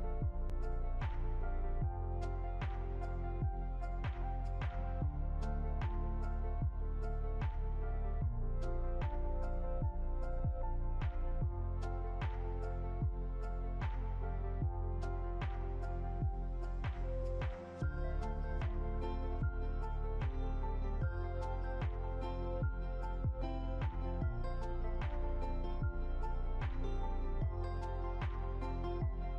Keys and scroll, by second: 22.4 ctrl+2.